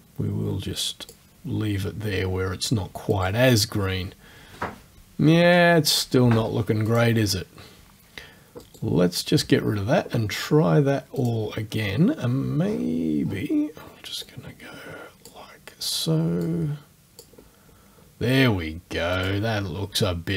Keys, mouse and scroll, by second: 3.1 click, 6.9 click, 8.6 right click, 11.2 click, 12.6-12.9 scroll down 2, 13.3 scroll down 2, 14.3-15.5 drag, 16.5-17.4 drag, 19.2 click.